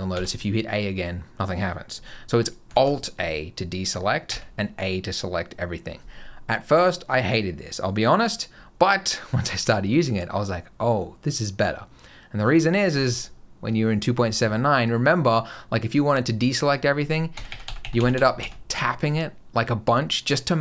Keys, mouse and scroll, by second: 0.0 a, 2.6 alt+a, 4.1 a, 12.3 click, 17.2-18.0 a, 18.2 a.